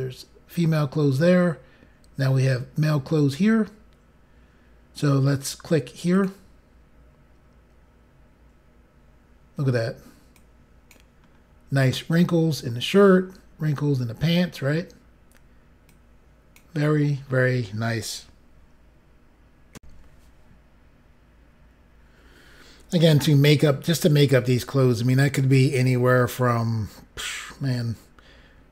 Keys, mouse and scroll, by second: 2.8 scroll down 1, 6.1 click, 9.3 scroll down 4, 10.4 click, 11.3 scroll down 2, 12.6 scroll up 2, 13.2 scroll down 2, 13.9-14.4 scroll down 3, 14.6 scroll up 1, 16.0 scroll up 1, 16.6 click, 19.7 Pause, 19.8 Insert.